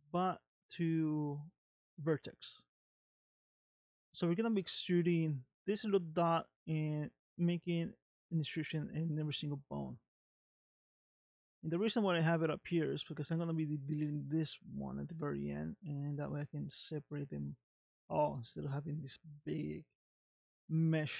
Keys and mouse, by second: 0.2-2.9 drag, 11.1 click, 12.2 click.